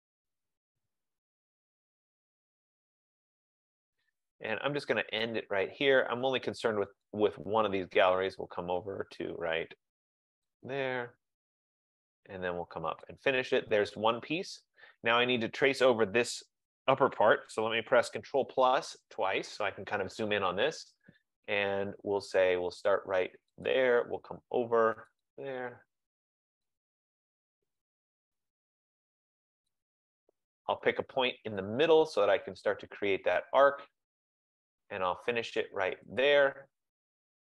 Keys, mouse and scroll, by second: 2.2 click, 3.8 F15, 7.2 click, 10.5 click, 13.1 click, 18.5 ctrl+=, 19.3 ctrl+=, 19.7 ctrl+=, 23.7 click, 25.3 click, 26.8 click, 28.0 click, 29.9 click, 33.8 click, 36.4 click.